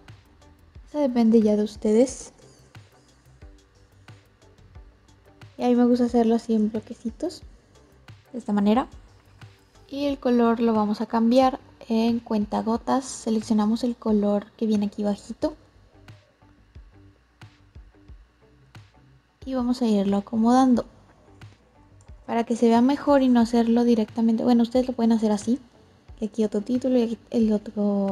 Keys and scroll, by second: 1.9 ctrl+c, 2.1 ctrl+v, 21.7 ctrl+c, 21.9 ctrl+v.